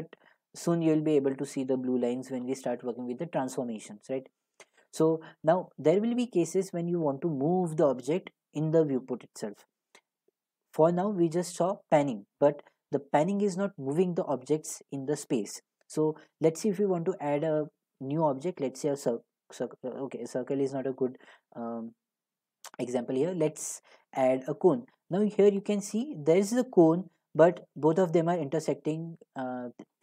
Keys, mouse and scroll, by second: 11.2-11.9 drag, 12.0 drag, 12.2 drag, 12.4 click, 13.3 shift+middle click, 14.5 shift+middle click, 16.7 a, 18.9 click, 21.1 Delete, 22.8 a, 24.5 click, 25.7-29.6 drag, 29.8-30.0 middle drag.